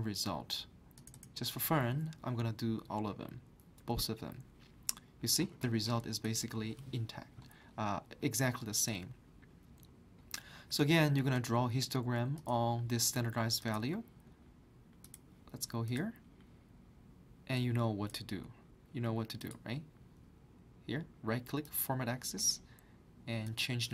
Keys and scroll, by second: 3.4 typing.